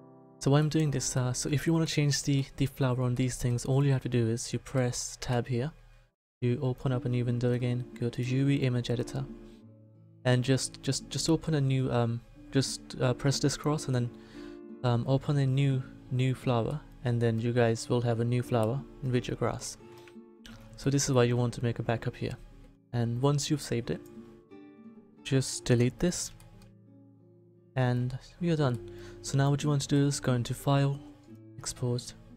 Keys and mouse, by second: 0.0 s, 5.2 Tab, 20.1 Tab, 25.7 Delete.